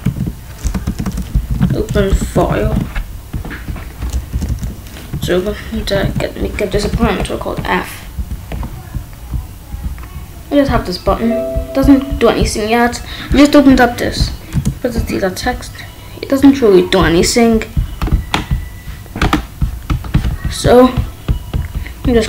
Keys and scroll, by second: 0.0 ctrl+s, 0.7-2.1 typing, 2.6 ctrl+s, 4.3 Left, 5.1 f, 6.0 ctrl+s, 8.1 ctrl+b, 14.5 Return.